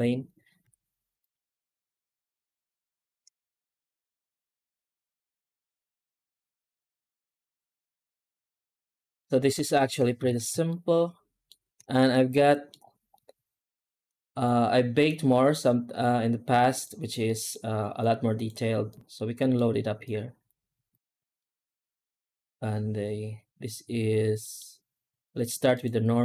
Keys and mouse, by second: 0.5 z, 2.9 middle drag, 4.0 middle click, 6.5 middle drag, 8.5 z, 10.1 ctrl+s, 10.5-11.3 shift+middle drag, 12.3 middle click, 13.9 click, 14.8-16.7 drag, 17.2 middle click, 17.8 click, 18.7 click, 18.9 click, 19.4 middle click, 20.0 click, 20.8 click, 21.3 middle click, 24.3 middle click, 25.6 click.